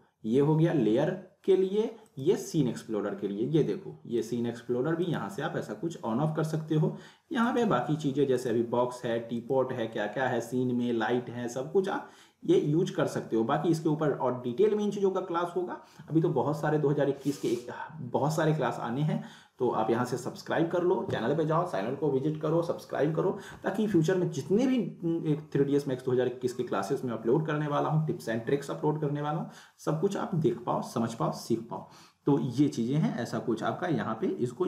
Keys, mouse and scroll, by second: 2.0 click, 7.5 click.